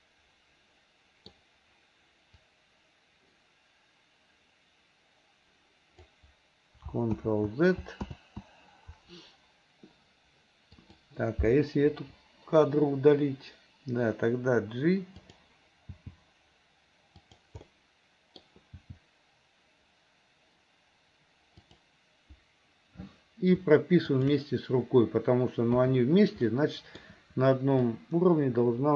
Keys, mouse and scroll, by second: 2.5-6.2 drag, 7.3 ctrl+z, 8.2 ctrl+z, 10.8 click, 12.0 Delete, 15.3 click, 16.0 g, 17.7 scroll up 1, 17.8 middle click, 18.4 scroll down 1, 18.9 g, 24.1 shift+click, 26.5 middle click, 27.9-28.9 drag.